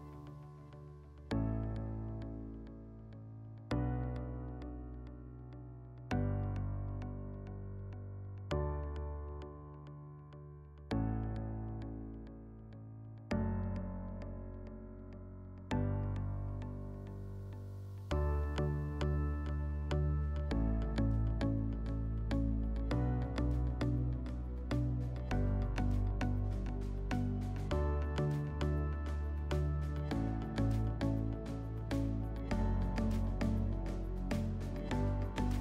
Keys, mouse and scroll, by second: 3.5 click, 6.1-8.2 drag, 13.7-15.8 drag, 16.7-18.7 drag, 21.0 click, 26.2 right click, 29.8 click, 30.5 click.